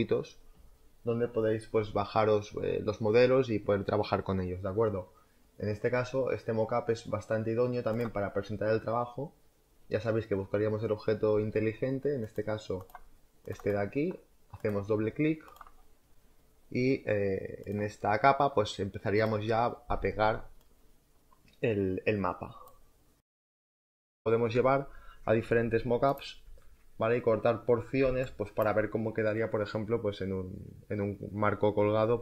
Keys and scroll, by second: 7.8 space, 17.6 space, 17.8 m, 19.1 m, 19.4 space, 19.7 m, 25.3 z, 27.9 space.